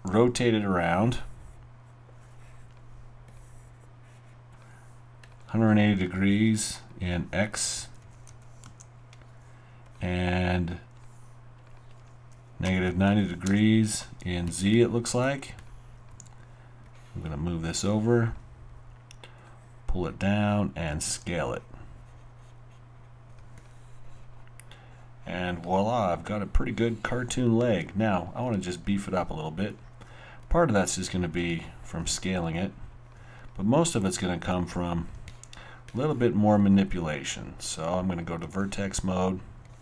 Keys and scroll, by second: 7.5-9.7 typing, 12.4-13.7 typing, 16.1 alt+w, 20.9 r, 34.0 alt+w, 35.2 alt+w.